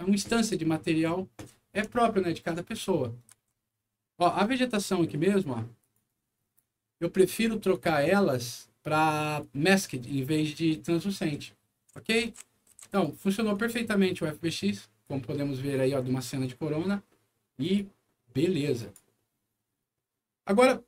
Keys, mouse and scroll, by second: 0.2 s, 3.2 Escape, 4.2 right click, 4.4 a, 5.7 click, 7.2 scroll down 1, 9.6-10.6 right drag, 11.1-12.9 right drag, 11.4-12.7 typing, 13.4-15.0 right drag, 15.6 right click, 17.5 click, 18.7 click.